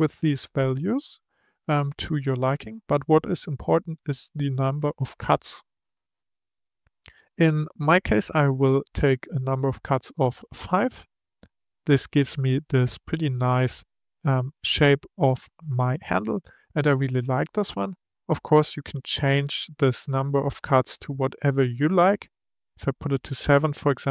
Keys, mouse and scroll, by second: 8.5-11.1 drag, 20.9-23.0 drag.